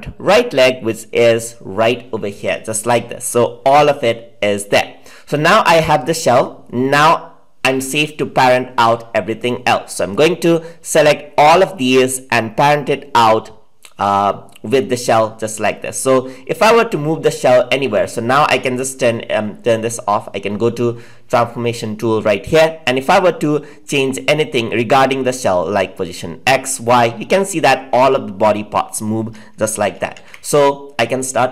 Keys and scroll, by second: 29.8 ctrl+z.